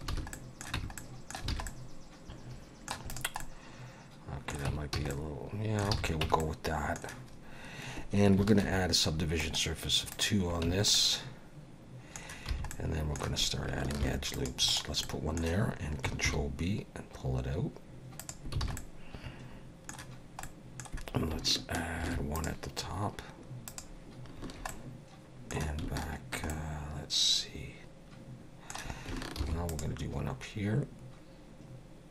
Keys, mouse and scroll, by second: 0.1 alt+a, 0.3 middle click, 0.8 Tab, 1.0 middle click, 1.5 alt+a, 1.7 middle click, 3.1 click, 3.4 middle click, 4.7 Tab, 4.9 a, 5.1 middle click, 5.9 alt+a, 6.2 Tab, 6.4 middle click, 8.6 ctrl+2, 9.4 right click, 10.7 Tab, 10.9 middle click, 12.5 2, 12.7 middle click, 14.0 ctrl+r, 15.0 middle click, 16.3 ctrl+b, 18.6 alt+a, 18.8 middle click, 20.4 middle click, 22.0 ctrl+r, 24.7 middle click, 26.5 middle click, 29.4 ctrl+r.